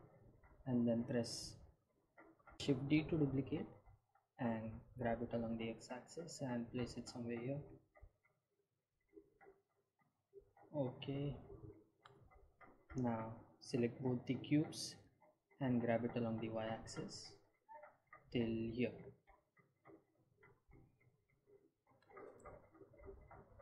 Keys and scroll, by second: 2.9 Tab, 5.2 shift+d, 5.6 x, 16.7 g, 17.0 y.